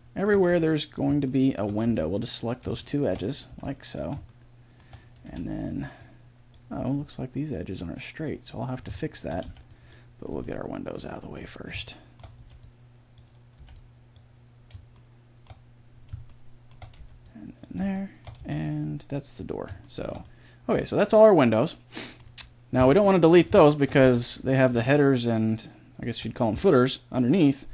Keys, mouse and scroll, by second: 0.5 b, 1.9 b, 3.5 b, 4.4-8.6 middle drag, 5.3 b, 9.0 middle click, 9.5 b, 10.4 b, 12.4 b, 13.6 b, 17.0 b, 18.4 b, 20.2 middle click, 22.8 KP_1, 24.0 b.